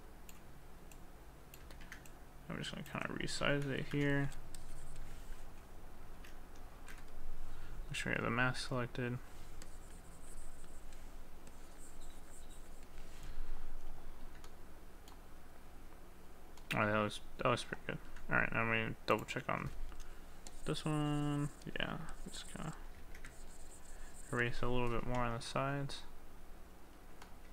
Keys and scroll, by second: 1.8 ctrl+z, 6.8 ctrl+z.